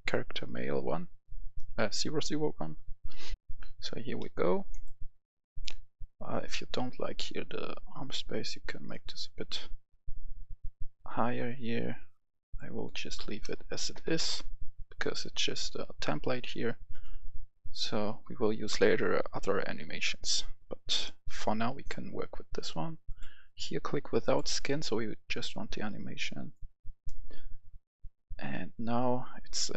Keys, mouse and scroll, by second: 3.3 F10, 4.0 middle click, 4.9 click, 5.7 scroll up 1, 8.3 click, 13.3 BackSpace, 13.8 KP_0, 14.1 Return, 16.8-21.9 drag.